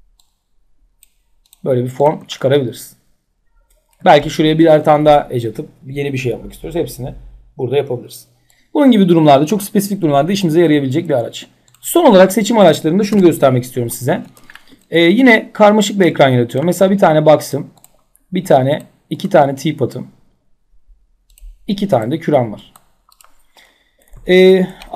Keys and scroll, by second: 12.7 Delete.